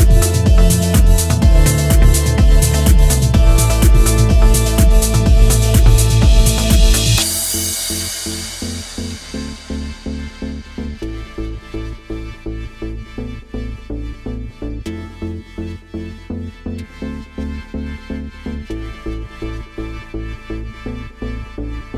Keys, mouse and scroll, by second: 0.7-1.0 scroll down 2, 0.9 middle click, 1.4 scroll up 3, 2.2 shift+middle click, 14.4 click, 17.4 click, 18.1 click, 18.3 click, 18.6 click, 18.8 click, 19.0 click, 19.3 click, 19.5 click, 20.0 scroll down 1, 20.2 middle click.